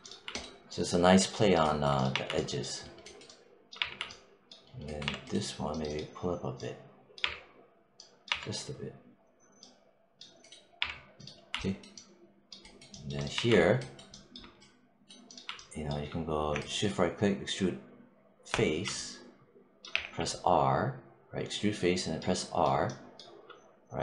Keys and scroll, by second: 1.9 1, 3.6 3, 4.9 1, 7.0 3, 10.6 3, 13.2 1, 19.8 r.